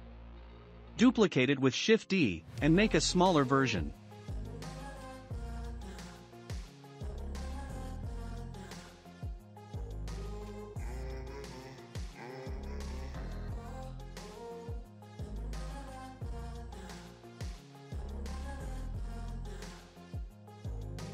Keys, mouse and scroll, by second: 1.5 shift+d, 3.8 s, 6.4-7.6 shift+middle drag, 7.6 s, 10.6 s, 12.3-13.3 shift+middle drag, 13.3-15.3 scroll up 8, 13.7 middle click, 15.5-17.8 drag, 17.8-18.2 scroll down 4, 18.2-19.5 shift+middle drag, 19.5 click, 20.6-21.1 middle drag.